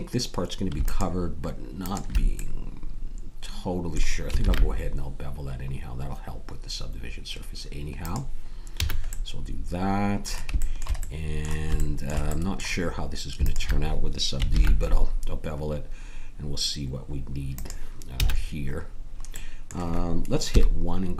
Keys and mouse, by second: 0.8-3.2 middle drag, 4.4 ctrl+b, 8.7 a, 9.1-11.3 middle drag, 14.5 ctrl+b, 18.1 a, 20.5 KP_1.